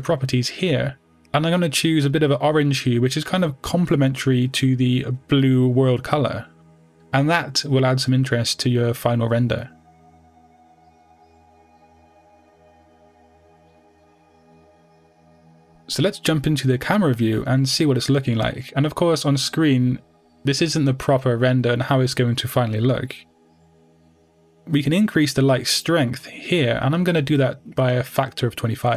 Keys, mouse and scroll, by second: 3.4-5.9 drag, 7.4-9.2 middle drag, 9.2 KP_7, 10.8 r, 11.6 click, 12.9 g, 14.2 click, 14.5 r, 15.2 click, 15.4 g, 16.1 click, 16.6-17.9 middle drag, 17.9 g, 18.7 click, 21.6 click, 22.4 scroll down 1, 23.0 scroll up 1.